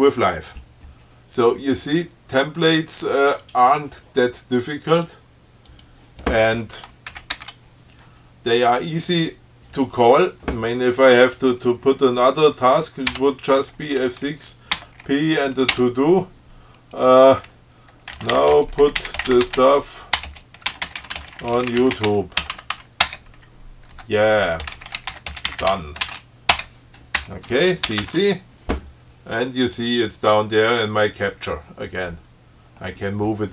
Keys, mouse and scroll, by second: 3.5 click, 5.9 click, 7.4 ctrl+x, 7.6 ctrl+s, 8.9 click, 13.4 F6, 15.0 p, 16.0 t, 18.2-26.8 typing, 27.8 ctrl+BackSpace, 28.1 ctrl+c, 29.1 scroll down 2, 32.1 scroll up 2, 32.9 scroll down 2.